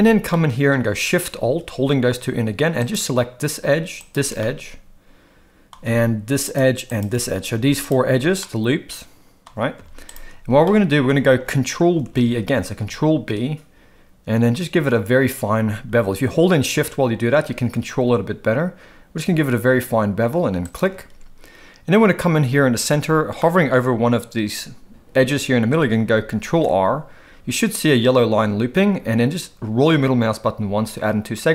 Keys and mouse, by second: 0.3 middle click, 2.9 alt+shift+click, 3.9 alt+shift+click, 4.4-5.7 middle drag, 6.4 alt+shift+click, 6.9 alt+shift+click, 7.5 z, 8.4-9.5 middle drag, 9.8 z, 10.6 shift+middle click, 12.0 ctrl+b, 23.4 middle click, 26.5 ctrl+r.